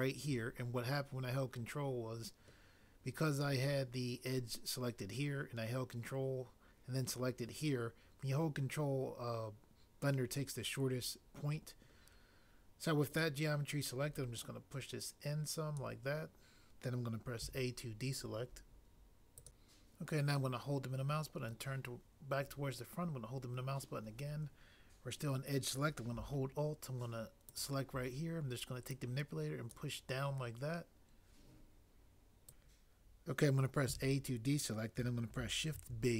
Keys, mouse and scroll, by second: 12.1 click, 17.4 a, 19.4 click, 27.5 alt+click, 32.5 click, 33.9 a, 35.7 b.